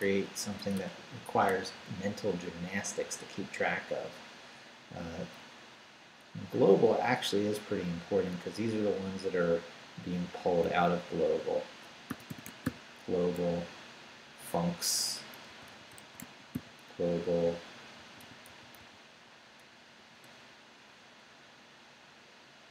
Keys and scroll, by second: 0.1 BackSpace, 5.8 Up, 10.6 g, 11.8-13.1 typing, 13.6 Down, 15.2-20.0 typing.